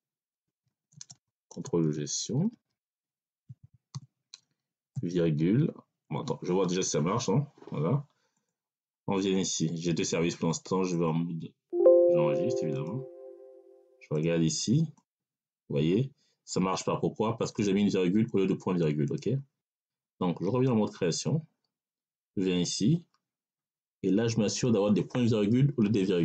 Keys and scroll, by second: 0.0-3.8 typing, 4.8 ,, 5.9 BackSpace, 25.9 BackSpace.